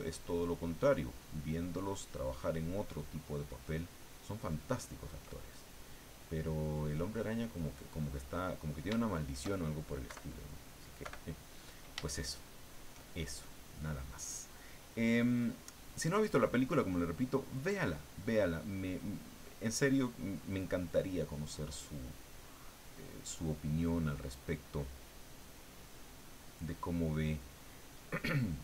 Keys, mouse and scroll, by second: 2.9-4.2 ctrl+drag, 4.7 ctrl+click, 5.5 ctrl+click, 7.8 click, 7.8 middle click, 9.0 shift+middle click, 10.1 KP_Subtract, 11.0 KP_Subtract, 12.1 shift+middle click, 14.3 click, 15.2 click, 16.4 click, 17.4 click, 18.2 click, 19.0 click, 19.4 click, 21.1 click, 22.4 click, 22.9 click, 23.6-24.6 drag, 25.7 click, 26.6 click, 27.7 click.